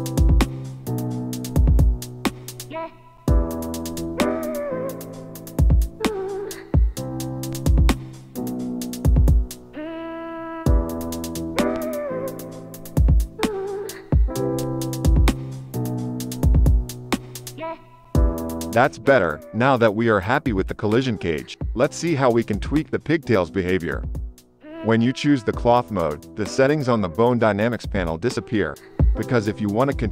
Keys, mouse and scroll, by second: 1.8 ctrl+r, 4.0 shift+click, 8.0-9.7 drag, 9.9 Tab, 11.0 KP_Divide, 11.7 shift+Left, 13.3 KP_0, 14.0 space, 19.7 click, 22.5 space.